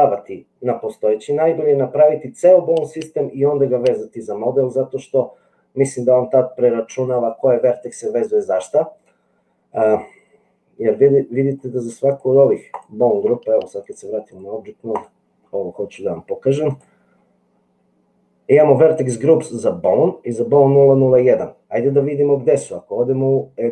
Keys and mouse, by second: 11.5 click, 12.1 click, 13.9 click, 14.9 click.